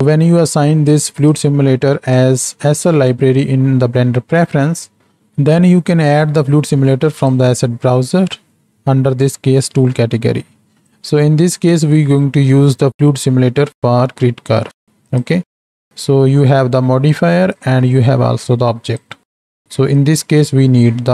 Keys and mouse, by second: 1.2-2.2 drag, 6.1-7.4 drag, 10.9-12.0 drag, 15.1 click, 15.9-17.2 drag, 17.5-19.0 drag.